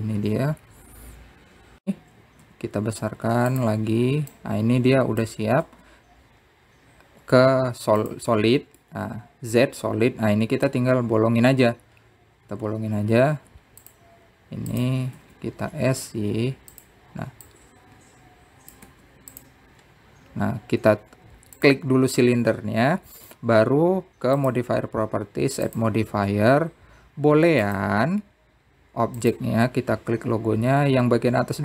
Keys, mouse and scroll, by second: 1.8 click, 2.4 click, 3.3 shift+click, 4.2 s, 6.0 click, 7.3 z, 10.5-13.6 middle drag, 15.0 `, 16.4 click, 16.9 s, 19.2 click, 23.3 click, 26.1 click, 29.5-30.5 drag, 30.9 click.